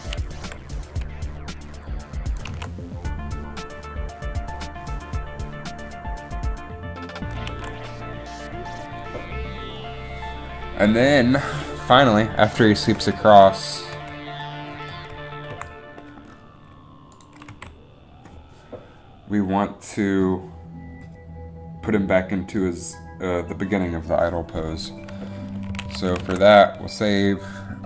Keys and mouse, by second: 0.5 i, 2.4 click, 2.6 alt+a, 7.7 alt+a, 11.8-12.9 drag, 13.1 Right, 13.5 Right, 14.1 Left, 14.9 Right, 15.1 Right, 15.6 Up, 17.6 Left, 25.8 a, 26.0 a, 26.3 ctrl+s.